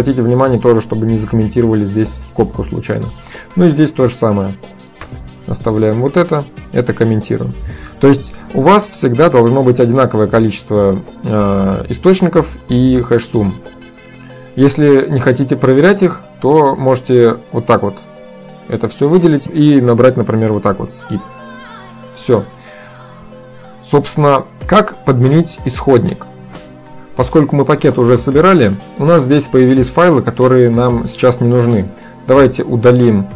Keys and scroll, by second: 5.1 Return, 6.1 ctrl+d, 7.3 ctrl+s, 19.9-21.2 typing, 21.9 ctrl+s.